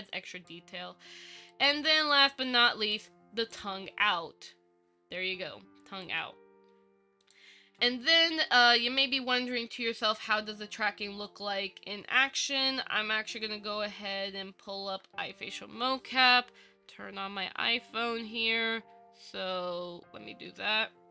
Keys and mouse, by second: 3.1 click, 6.2-7.5 drag.